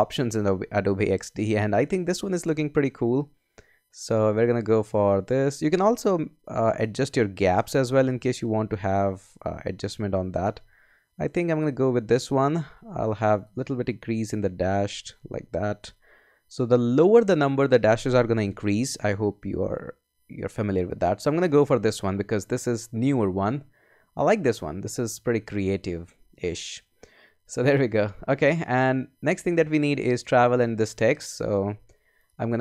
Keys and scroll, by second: 0.2 Up, 2.2 Down, 4.0 Down, 5.1 Down, 7.6 Up, 8.3 Down, 9.6 Up, 10.4 Down, 14.2 Up, 14.9 Down, 19.4 Down.